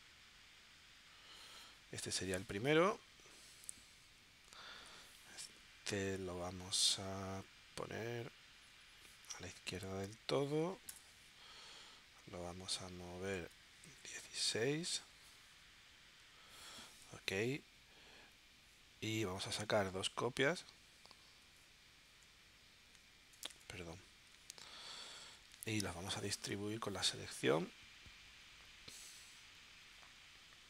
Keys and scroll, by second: 10.9 Return, 12.6 1, 13.3 2, 14.5 Tab, 24.0 super+z.